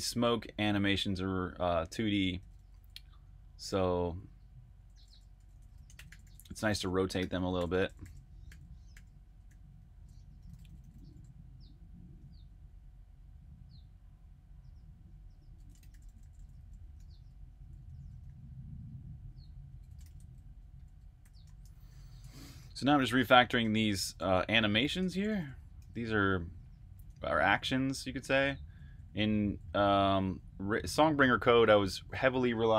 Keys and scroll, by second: 0.0-12.5 typing, 15.4-20.4 typing, 22.7-27.0 typing, 28.4-30.1 typing.